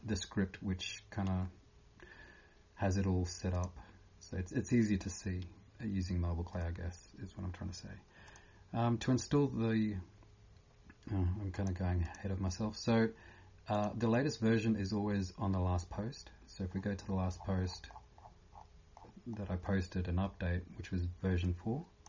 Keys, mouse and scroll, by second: 3.5 click, 12.1 click, 16.7 scroll down 1, 17.3 scroll down 1, 19.7 scroll down 10, 19.7 scroll up 1, 21.4 click, 21.4 scroll up 1.